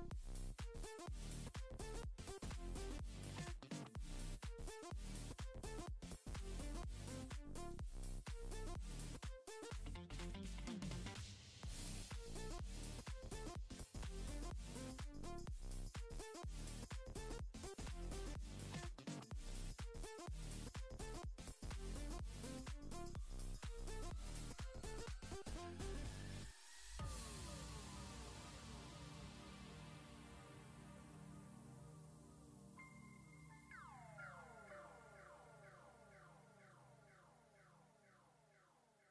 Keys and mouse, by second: 0.5 f, 0.7 g, 0.8 click, 1.1 click, 1.3 click, 1.5 click, 1.6 click, 2.4 shift+click, 2.8 shift+click, 3.1 click, 3.4 click, 3.6 click, 3.8 click, 4.2 middle click, 4.5 click, 5.4 middle click, 5.7 click, 6.6 middle click, 7.1 middle click, 7.4 f, 7.5 click, 7.9 click, 8.1 click, 8.2 click, 8.4 middle click, 8.6 click, 9.1 click, 9.3 middle click, 9.5 click, 9.6 middle click, 9.8 click, 10.1 click, 10.8 middle click, 11.3 ctrl+Tab, 12.5 g, 13.2 middle click, 13.5 click, 13.6 middle click, 14.0 click, 14.3 middle click, 14.5 ctrl+Tab, 14.9 click, 15.1 middle click, 15.3 click, 15.5 click, 16.2 middle click, 16.5 middle click, 16.8 click, 17.0 click, 17.3 KP_1, 17.5 shift+middle click, 17.6 click, 17.8 click, 18.5 click, 18.8 middle click, 18.9 middle click, 19.1 click, 19.9 middle click, 20.3 ctrl+Tab, 21.3 ctrl+a, 21.6 click, 22.8 middle click, 23.4 middle click, 23.9 click, 24.3 click, 25.3 click, 25.8-27.5 drag, 29.4 click, 29.8 middle click, 30.6 click, 31.3 ctrl+Tab, 31.6 click, 31.8 click, 32.1 click, 32.2 f, 32.4 click, 32.9 click, 33.1 click, 33.8 middle click, 34.0 middle click, 34.1 ctrl+Tab, 34.6 ctrl+Tab, 35.0 shift+middle click, 35.4 click, 35.6 middle click, 35.8 middle click, 36.3 middle click, 37.0 middle click, 38.0 middle click, 38.2 shift+middle click.